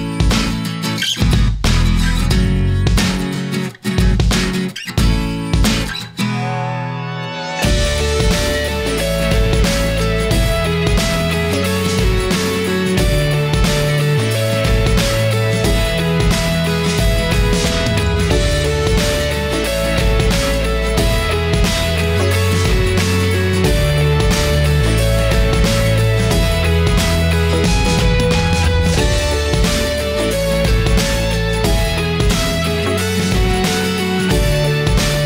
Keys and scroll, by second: 2.0 Return.